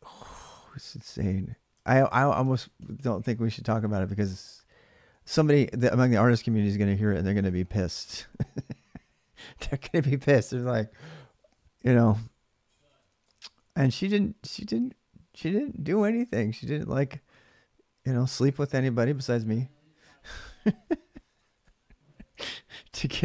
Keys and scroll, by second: 0.1-3.7 typing, 1.5 ctrl+[, 6.0 ctrl+[, 6.1-8.4 typing, 12.5-14.3 typing, 20.9-21.8 typing, 22.1 alt+Tab.